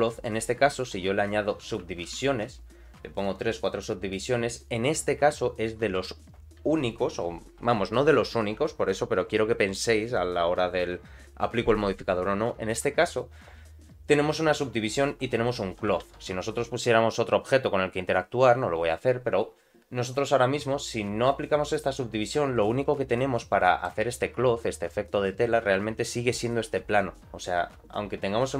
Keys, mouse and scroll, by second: 1.6 ctrl+2, 1.8 ctrl+3, 2.0 ctrl+3, 2.0 ctrl+4, 3.2 click, 4.5 middle click, 5.9 KP_Decimal, 16.0 shift+a, 21.7 click, 22.1-22.5 scroll down 2, 22.5-23.8 middle drag.